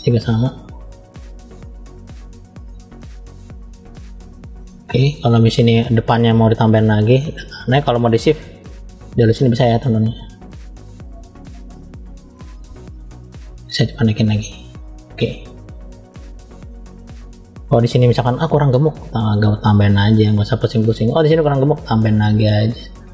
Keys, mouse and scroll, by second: 0.5 click, 1.9 click, 2.4 click, 2.7 click, 3.1 middle click, 4.5 shift+middle click, 5.4 middle click, 6.0-6.8 scroll up 1, 7.5 scroll up 1, 7.9 shift+click, 11.4-13.1 shift+drag, 13.8 click, 15.1 middle click, 16.1-16.7 scroll down 1, 16.7 middle click, 17.5 middle click, 18.8 click, 20.6 middle click, 21.7 click, 23.0 middle click.